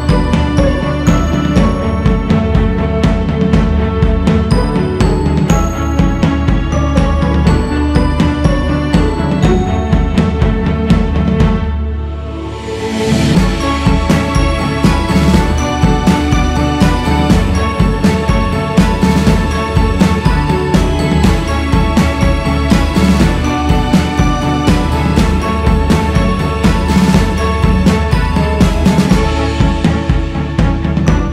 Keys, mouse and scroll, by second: 3.1 shift+c, 3.4 f, 5.3-8.1 drag, 8.1 shift+s, 8.6-9.3 scroll up 1, 9.3-11.7 drag, 11.7-12.2 scroll down 3, 12.2-13.5 scroll up 4, 12.7 shift+c, 13.5-31.3 drag.